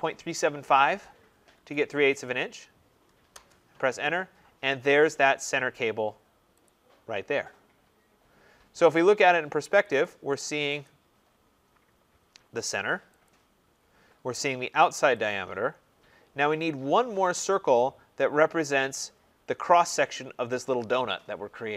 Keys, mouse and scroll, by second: 1.5 shift+', 3.2 Return, 4.9 middle click, 5.0 middle click, 5.1 middle click, 6.6 click, 9.7 click, 9.9 click, 10.7 click, 11.2-11.7 scroll down 2, 11.7 scroll up 1, 11.8 middle click, 11.9 middle click, 13.2 click, 13.7 middle click, 13.7 middle click, 13.8 middle click, 15.0 click, 15.6 middle click, 15.6 middle click, 18.8 scroll.